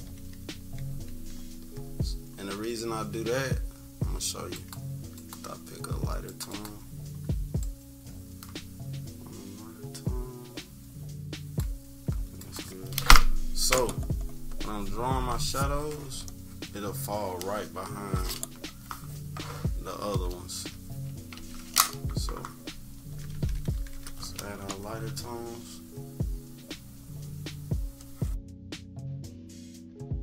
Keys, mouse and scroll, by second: 0.3 =, 0.5 =, 0.8-1.4 scroll up 2, 0.8 =, 4.5-6.1 drag, 6.3 click, 6.5 click, 7.5-11.5 drag, 15.3 click, 16.2 click, 21.3 ctrl+z, 22.7 ctrl+-, 22.9 ctrl+-, 23.2 ctrl+=, 23.9 =, 25.6-28.3 drag, 28.7-30.2 drag.